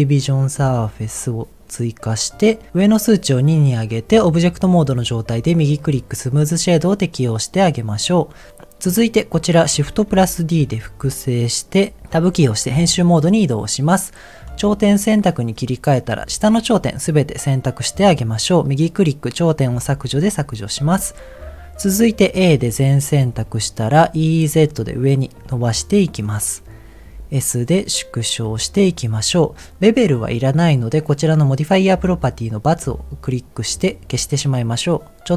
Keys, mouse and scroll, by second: 3.7 click, 5.3 right click, 6.3 click, 6.6-8.2 middle drag, 10.1 shift+d, 12.3 Tab, 14.4 click, 15.0 middle click, 16.0 click, 16.2 middle click, 16.8-17.9 middle drag, 18.4-20.1 right drag, 20.1 middle click, 22.4 a, 24.2 e, 24.5 z, 25.4 z, 26.3 click, 27.1 s, 28.7 click, 29.1-29.7 scroll up 2, 33.5 click, 34.9 middle click, 35.2 right click.